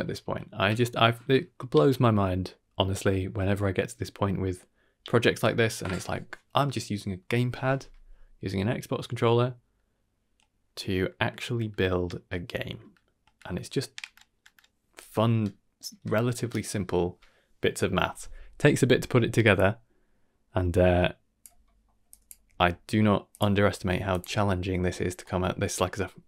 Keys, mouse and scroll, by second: 18.8 scroll down 1, 19.0 middle click, 19.6-21.4 drag, 21.6 middle click, 22.1 click, 22.4 g, 23.7 g, 25.2 middle click, 25.7-26.2 drag.